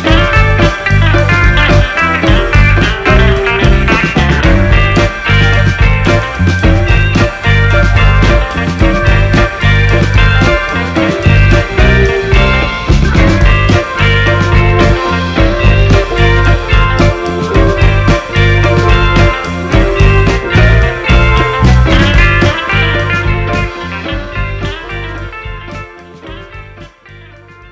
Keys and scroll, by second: 5.5 space, 9.8 BackSpace, 10.2 1, 10.5 6, 10.7 Return, 13.9 space, 25.7 l, 26.1 a, 26.3 Return.